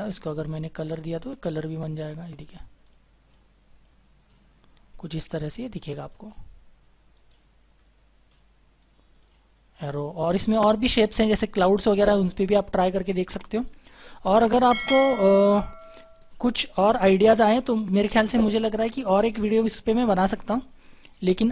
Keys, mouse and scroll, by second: 3.3 double click, 7.1 right click, 7.7-8.1 scroll down 1, 9.5-11.0 scroll up 1, 11.0-12.0 scroll down 1, 13.0-15.2 scroll up 1.